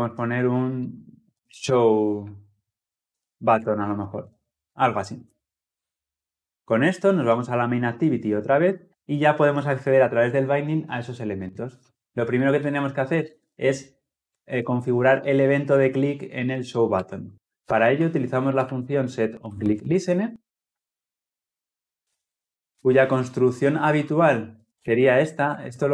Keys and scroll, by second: 6.6 ctrl+alt+Left, 14.0 Return, 21.9 Return.